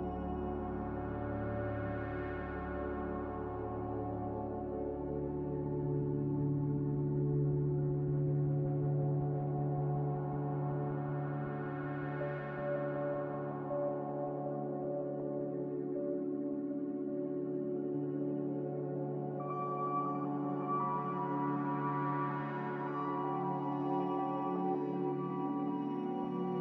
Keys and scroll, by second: 13.4 m.